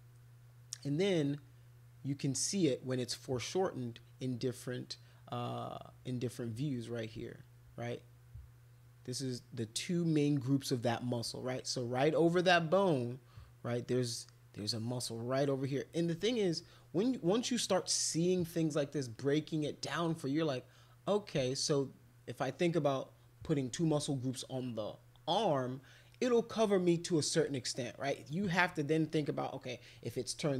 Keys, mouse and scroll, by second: 26.1 middle click, 27.1 middle click, 27.7 middle click, 28.9 middle click.